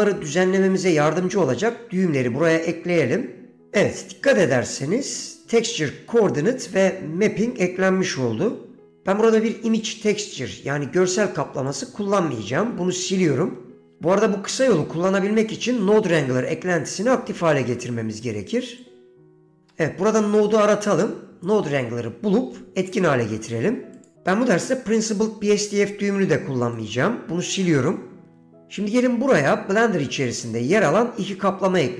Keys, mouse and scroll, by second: 4.6 middle click, 11.8 click, 13.6 Delete, 17.6-19.7 drag, 26.8 click, 28.4 Delete.